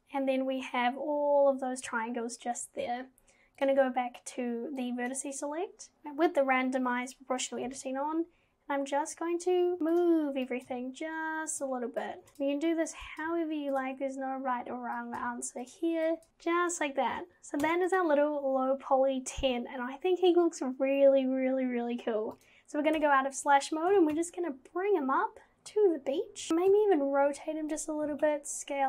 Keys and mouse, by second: 4.9 click, 7.7 g, 10.6 click, 10.7 g, 12.2 click, 12.3 g, 13.2 click, 13.3 g, 15.1 click, 15.2-16.3 g, 16.2 click, 17.6 Tab, 22.4 click, 23.0 /, 23.9 g, 26.5 g, 28.0 g.